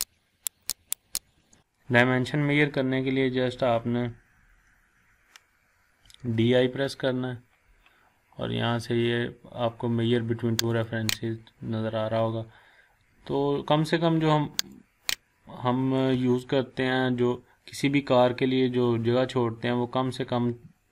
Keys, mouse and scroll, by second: 5.8-6.7 typing, 13.2 scroll up 1, 14.6 click.